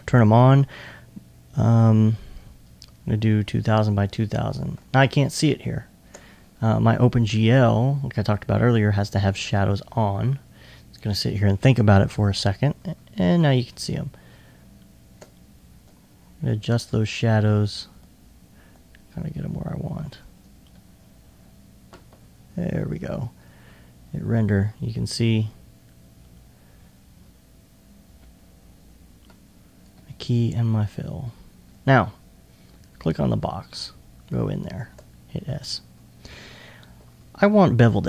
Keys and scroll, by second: 20.6 2, 22.0 1, 23.0 super+1.